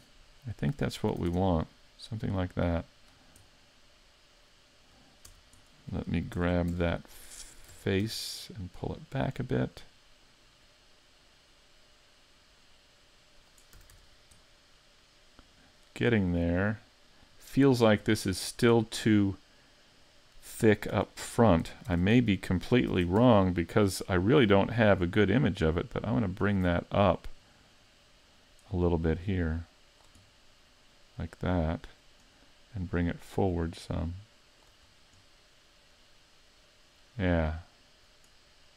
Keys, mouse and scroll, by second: 1.1 a, 1.3 Tab, 1.4-1.8 scroll down 5, 1.8 middle click, 2.7-3.1 scroll down 2, 3.1-3.5 scroll up 5, 3.5 middle click, 5.3 Tab, 5.7 middle click, 6.4 ctrl+Tab, 7.7 ctrl+Tab, 8.7 right click, 9.1 middle click, 10.7 click, 13.8 a, 14.0 Tab, 14.1-14.4 scroll down 4, 14.4 middle click, 17.8-18.2 scroll up 4, 18.2 shift+middle click, 18.8 middle click, 21.0 Tab, 21.9 ctrl+Tab, 22.9 ctrl+Tab, 23.7 right click, 24.1 middle click, 25.7 click, 26.7 middle click, 29.2 click, 30.3 middle click, 32.8 click, 33.5 click, 34.9-35.2 scroll up 4, 35.2 middle click.